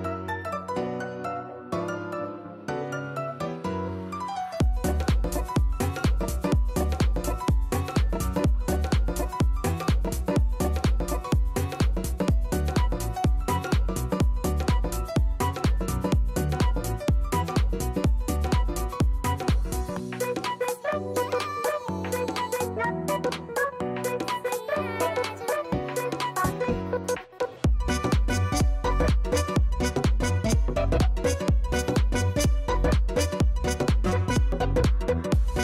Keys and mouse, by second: 0.0 click, 2.2 click, 4.3 click, 7.4 click, 11.9 click, 12.3 click, 12.9 ctrl+z, 12.9 click, 14.3 click, 16.9 alt+right click, 16.9 z, 17.2 alt+click, 18.5 alt+middle click, 20.0 click, 20.5 right click, 21.3 click, 22.2 alt+right click, 23.0 alt+click, 23.5 click, 24.1 ctrl+3, 25.5 click, 26.6 click, 28.0 right click, 28.4 click, 28.8 click, 29.9 shift+click, 30.8 click, 31.2 alt+right click, 31.9 alt+click, 32.7 click, 34.7 right click, 35.3 alt+click.